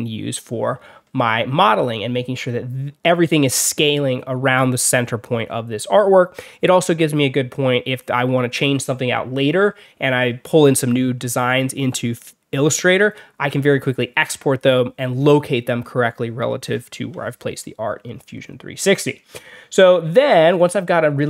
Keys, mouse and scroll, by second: 1.2 alt+scroll down 2, 3.2 alt+scroll down 2, 18.0-18.5 alt+scroll down 4, 19.9 alt+scroll up 2.